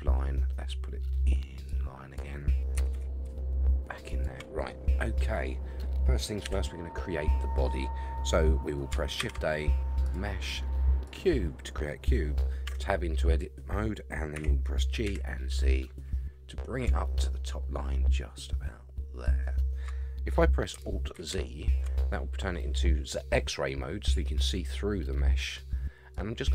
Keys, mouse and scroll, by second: 2.7 g, 4.7-5.2 middle drag, 6.4 KP_1, 7.1 scroll up 5, 9.2 shift+a, 12.7 Tab, 14.3 g, 21.1 alt+z, 26.1-26.5 drag.